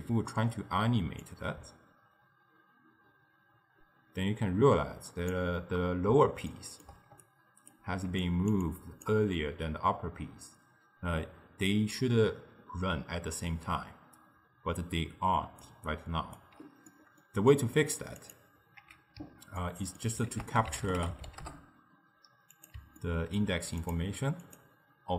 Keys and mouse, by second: 1.3-5.2 drag, 6.5-7.1 shift+middle drag, 7.1-9.8 typing, 7.3 right click, 8.3 click, 15.7 d, 15.9 right click, 16.4 d, 16.9-18.3 middle drag, 18.3 click, 19.4 x, 19.6 ctrl+middle click, 20.4 ctrl+a, 23.1-23.9 ctrl+middle drag, 23.9-25.1 drag.